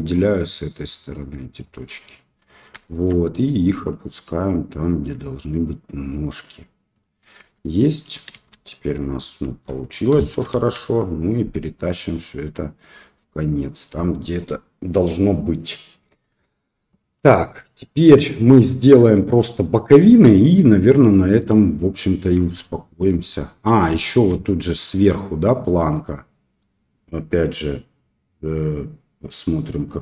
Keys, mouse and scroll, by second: 0.1-1.5 shift+drag, 2.8 shift+middle click, 3.8-7.0 drag, 7.4 Tab, 7.8 middle drag, 8.3 shift+z, 8.9-9.6 middle drag, 10.1 KP_1, 10.5 KP_3, 11.7-13.8 drag, 17.9-18.4 middle drag, 18.9-19.6 middle drag, 21.4-22.3 middle drag, 22.6-23.1 shift+middle drag, 23.9 shift+middle drag, 24.7-26.6 middle drag.